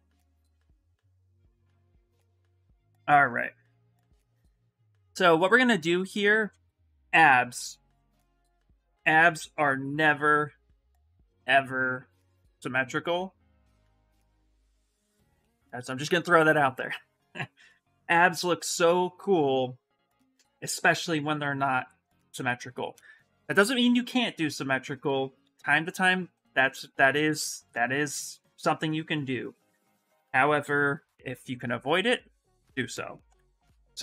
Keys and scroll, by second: 3.2 s, 4.4 s.